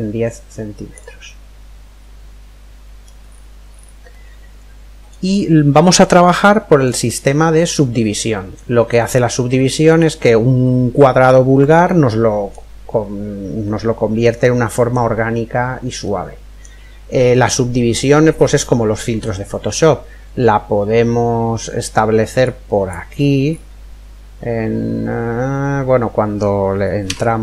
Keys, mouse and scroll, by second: 0.9-2.8 middle drag, 2.8-3.7 scroll down 1, 3.7-5.3 middle drag, 5.3-5.7 scroll up 1, 5.7-9.0 middle drag, 9.4-10.2 scroll up 1, 10.2-11.2 scroll down 1, 11.2-12.9 middle drag, 13.9-17.5 middle drag, 22.0 click, 22.8-24.9 middle drag, 24.8-25.1 scroll up 1, 26.6 Tab.